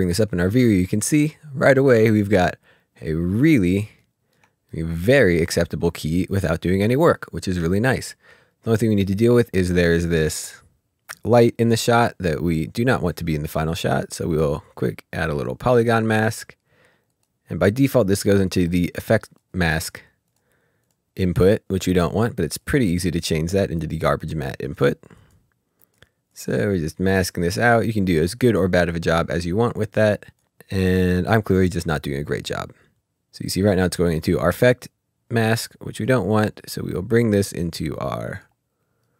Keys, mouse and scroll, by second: 1.1-1.6 scroll up 2, 2.8 ctrl+scroll down 1, 3.5 scroll down 2, 4.0 ctrl+middle click, 4.7 middle click, 5.1 scroll up 1, 5.5 scroll down 1, 5.9 scroll up 1, 6.5-7.0 ctrl+scroll down 2, 7.1 middle click, 7.7 scroll up 1, 8.1 middle click, 11.9 middle click, 13.8 click, 15.3 click, 17.1 click, 21.6 click, 28.6 click, 31.7 click, 35.9 click, 37.6 click, 39.0 right click.